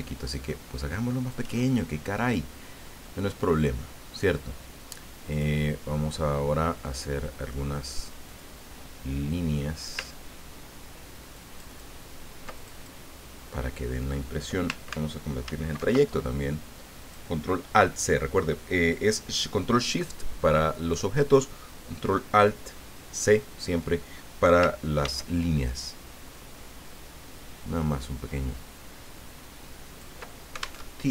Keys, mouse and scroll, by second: 5.3 click, 8.3 click, 11.3 ctrl+click, 12.5 ctrl+click, 15.4 ctrl+alt+c, 17.0 click, 25.0 ctrl+d, 26.3-30.4 ctrl+drag, 30.8 alt+Tab.